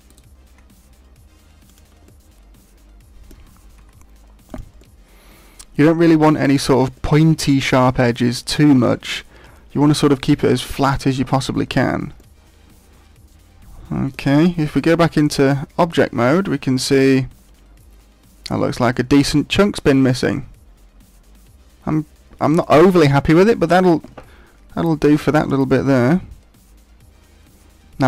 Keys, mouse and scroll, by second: 0.2 right click, 0.5 g, 1.7 click, 2.0 middle click, 3.8 g, 4.5 click, 4.8 middle click, 6.9 middle click, 8.4 middle click, 12.2 middle click, 14.6 Tab, 14.9 middle click, 16.0-16.6 scroll down 7, 16.7 middle click, 22.9 middle click, 24.0 Tab, 24.4-25.3 scroll up 8, 25.3 shift+middle click, 25.7 middle click.